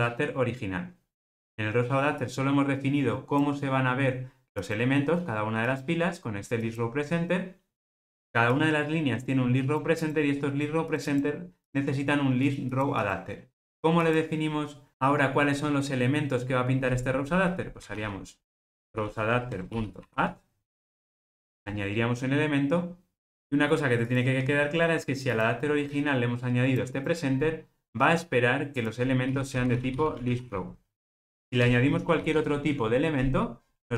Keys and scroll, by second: 19.6 Return.